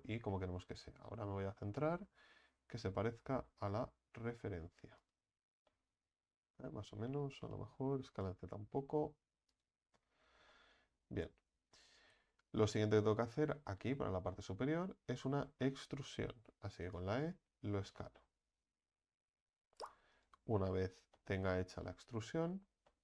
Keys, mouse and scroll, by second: 0.2 ctrl+z, 1.7 ctrl+b, 5.3 Tab, 5.7-7.2 middle drag, 7.2 Tab, 8.1 s, 10.1 Tab, 10.5-11.3 middle drag, 11.3 Tab, 11.9 right click, 12.4 alt+shift+right click, 12.9-16.0 shift+middle drag, 16.0 scroll up 3, 16.7 e, 17.3 s, 21.1-22.3 middle drag, 22.3 scroll up 2, 22.9 middle click.